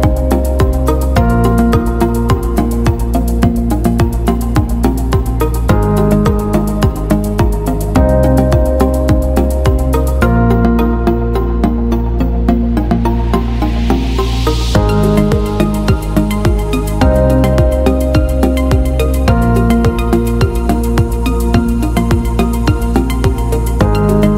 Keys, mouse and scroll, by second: 3.3 click, 7.1 click, 10.8 click, 11.8-13.8 drag, 15.5 click, 16.6 click, 18.1 right click, 21.4 click, 22.7 click, 24.1 click.